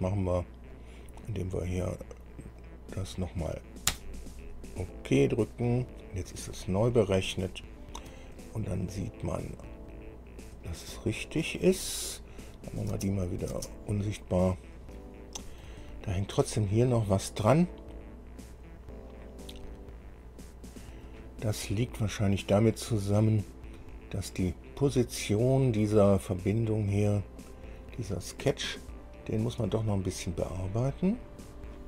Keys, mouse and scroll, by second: 0.9 click, 2.8 click, 4.1 Return, 6.5 scroll down 2, 7.1-7.4 scroll down 2, 7.6 shift+middle click, 8.6-9.9 shift+middle drag, 10.1-10.5 scroll up 2, 10.8-11.8 middle drag, 12.7 click, 13.1 space, 13.4 click, 14.6 scroll down 2, 15.0 middle click, 16.9-17.3 shift+scroll up 3, 18.4 scroll up 1, 18.9-19.3 scroll up 1, 19.6 scroll down 1, 20.5 scroll down 1, 27.6 click, 28.9 scroll down 1, 29.4 scroll down 2, 29.9 shift+click, 30.7-31.5 shift+scroll up 5.